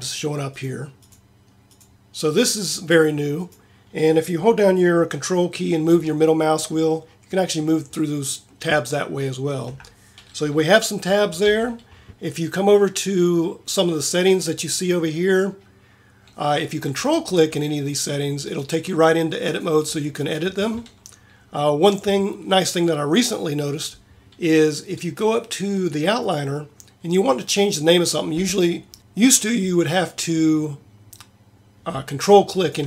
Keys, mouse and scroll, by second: 0.6-2.7 drag, 11.4 t, 16.9-19.5 drag, 19.5-21.3 right drag, 32.4-32.8 right drag.